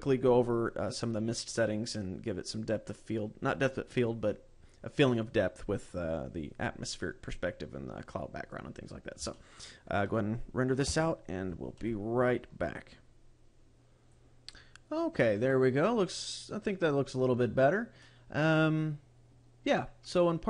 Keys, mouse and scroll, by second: 9.8 shift+middle click.